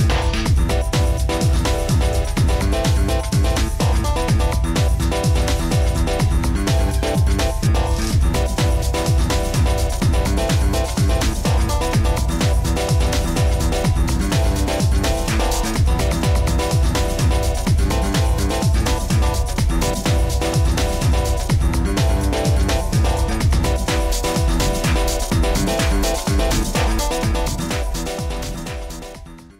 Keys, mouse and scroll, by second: 2.4 click, 9.7 click, 10.4 middle click, 10.4-12.6 scroll, 12.6 click, 13.4 click, 14.1 click, 14.7 click, 15.4 click, 16.4-16.8 scroll, 19.3 click, 20.7 click, 21.7-22.9 scroll, 24.6 click, 25.0-25.6 scroll, 25.6 click, 25.9-27.1 scroll, 27.3-28.2 scroll, 28.2 scroll, 29.3 middle click, 29.4 scroll.